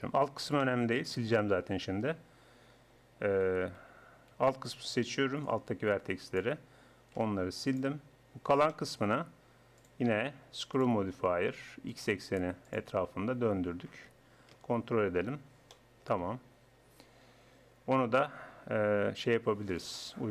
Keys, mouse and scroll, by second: 1.9 click, 2.3-3.5 drag, 3.5 a, 3.8 a, 4.3 a, 4.9 b, 7.1 x, 8.4 Tab, 13.7 middle click, 14.5 KP_1, 15.7-17.7 drag, 19.9-20.3 drag.